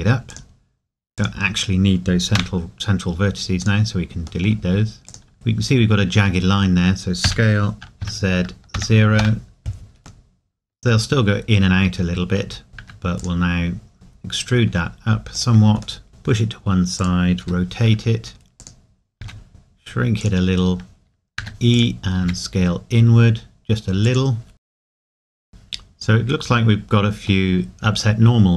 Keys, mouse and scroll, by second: 0.3 click, 4.5 middle click, 5.3 middle click, 7.2 s, 9.2 KP_Enter, 10.2 middle click, 11.5-12.7 scroll up 2, 12.7 click, 13.6 scroll down 1, 13.9 g, 15.3 click, 16.0 middle click, 17.0 click, 17.4 r, 18.6 click, 19.2 s, 20.2 click, 20.2 click, 22.2 s, 24.0 click, 24.5 KP_Decimal, 24.6 middle click, 24.7 ctrl+z, 24.8 alt+click, 24.9 s, 24.9 click, 25.0 g, 25.1 click, 25.4 s, 25.5 click, 26.4 scroll up 1, 27.5 middle click.